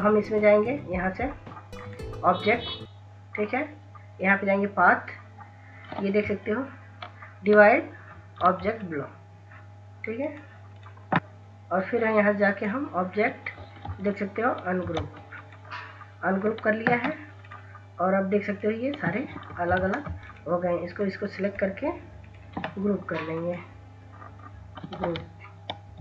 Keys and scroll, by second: 7.3 ctrl+s, 7.8 ctrl+s, 8.4 ctrl+s, 8.7 ctrl+s, 8.9 ctrl+s, 14.6 ctrl+s, 15.4 ctrl+s, 15.4 ctrl+s, 20.0 ctrl+z, 25.7 ctrl+s, 25.9 ctrl+s.